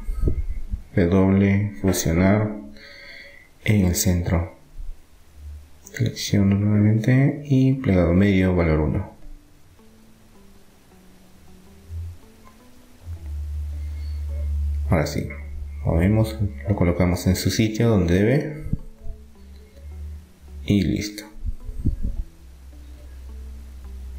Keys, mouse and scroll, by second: 1.0 w, 5.9-8.6 right drag, 9.2-11.0 drag, 12.4 Tab, 13.1-14.3 middle drag, 14.6 middle click, 15.3-17.0 drag, 17.4-19.4 middle drag, 19.4-21.3 drag, 22.6-24.1 middle drag.